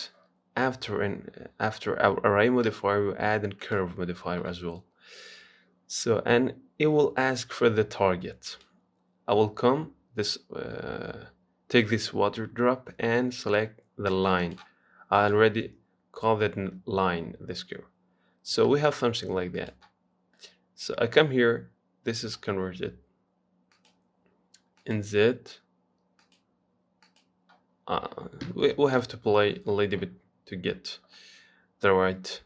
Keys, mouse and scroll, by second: 0.0 click, 4.0-5.9 drag, 8.7 click, 15.4 click, 18.0-18.5 scroll down 4, 18.5-18.9 scroll up 3, 18.9 shift+middle click, 19.8 click, 20.3 scroll down 1, 20.6-24.0 middle drag, 24.0-29.0 drag, 29.0 KP_1, 29.2 KP_3.